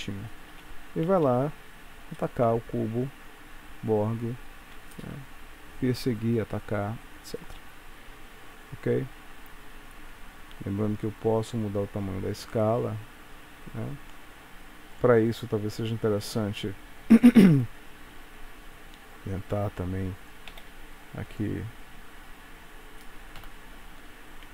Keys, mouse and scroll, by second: 0.6 space, 1.2 space, 1.7 scroll down 1, 2.3 middle click, 3.1 space, 4.8 space, 9.0-9.4 scroll down 1, 9.5-10.1 scroll up 1, 11.3 click, 15.1 click, 15.5 scroll down 2, 17.1-17.5 scroll down 1, 17.6 s, 20.6 g, 23.5 shift+Left.